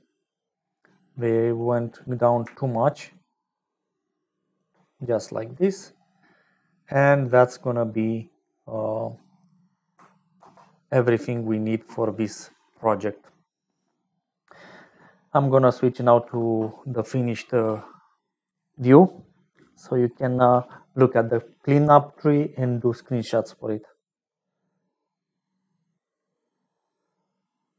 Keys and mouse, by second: 0.0 middle click, 3.1 shift+click, 3.4-4.5 shift+middle drag, 5.5 click, 5.6 middle click, 6.3 middle click, 10.3 ctrl+s.